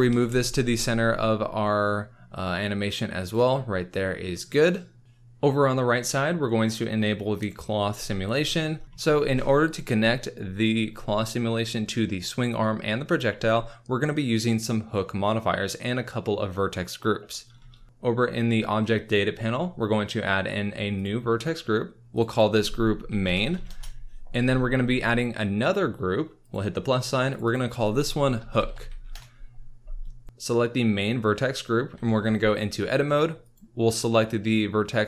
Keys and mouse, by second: 0.0 g, 0.3 y, 3.5 click, 4.9 middle click, 7.3 click, 20.9 click, 22.1 click, 22.2 click, 22.6-23.7 shift+middle drag, 26.4 middle click, 27.3 middle click, 27.4-29.1 middle drag, 28.7 o, 31.9 Tab, 33.4 middle click.